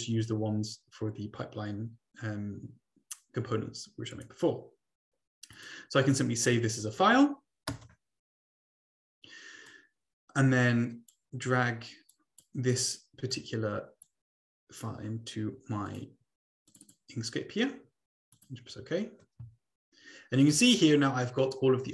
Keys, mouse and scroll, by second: 4.1 right click, 5.5 click, 6.2 click, 7.7 Return, 9.6 click, 10.1-11.6 drag, 12.3 click, 12.8 click, 14.0 click, 15.9 click, 16.8 click, 18.0 click, 18.9 click, 19.9-20.9 ctrl+scroll down 2, 21.3-21.9 drag.